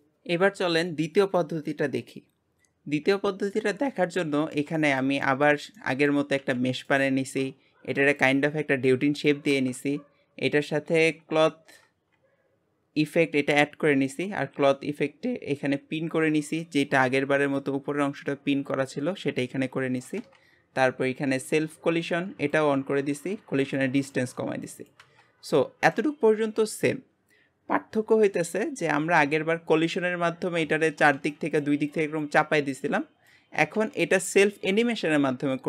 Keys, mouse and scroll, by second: 0.0-6.4 middle drag, 6.4 g, 7.6-9.7 scroll up 1, 9.7-11.6 scroll up 1, 11.6-16.3 scroll up 1, 16.3-16.7 scroll down 10, 16.7-25.1 scroll up 1, 25.1-25.5 scroll up 1, 25.5-29.9 middle drag, 30.4-30.7 scroll down 1, 30.7-35.6 shift+middle drag.